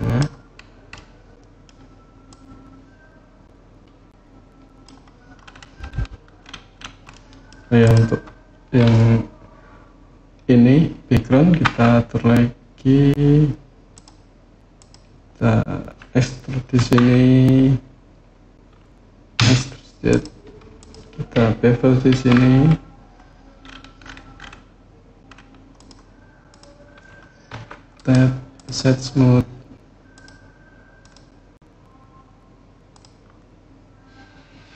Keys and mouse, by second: 0.7-1.4 middle drag, 2.1-4.7 drag, 7.0 middle click, 7.6 click, 11.4 Tab, 13.7 click, 16.5 e, 19.1 z, 19.8 click, 21.9 ctrl+b, 25.5 click, 26.3 click, 27.3 Tab, 29.9 click, 30.8 click, 32.7 click.